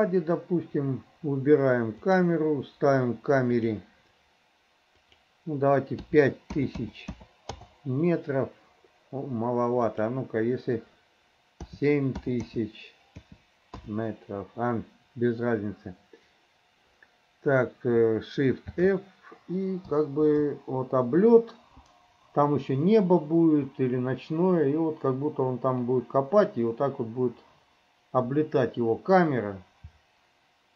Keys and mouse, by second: 2.0 click, 3.5 click, 5.0-7.6 drag, 6.7 KP_0, 10.0-13.9 drag, 12.4 KP_0, 18.7 shift+f.